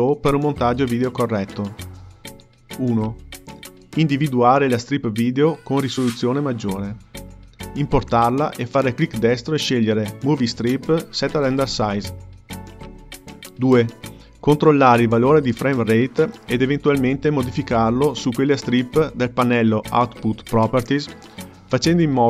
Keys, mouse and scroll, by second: 0.9-3.2 drag, 4.5-7.0 middle drag, 7.0 KP_Decimal, 8.9 click, 10.7-13.9 right drag, 18.0 shift+b, 21.0 shift+b.